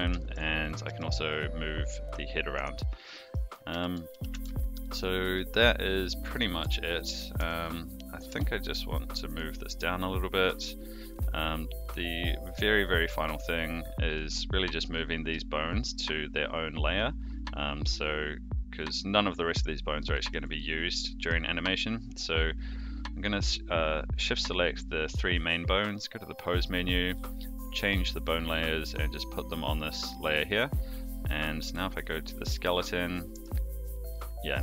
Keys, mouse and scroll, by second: 0.2 shift+middle drag, 0.7 click, 0.8 g, 3.0 middle drag, 3.7 a, 4.1 alt+g, 4.3 alt+r, 4.9 click, 5.3 middle drag, 6.2 click, 6.6 Tab, 7.8 Tab, 7.8 click, 8.3 g, 12.5-14.2 middle drag, 14.8 click, 15.7 shift+click, 16.5 shift+click, 20.1 shift+middle drag, 20.5-21.2 middle drag, 25.8-30.5 drag, 31.0 click, 31.8 click, 33.3 click, 34.1-34.5 middle drag.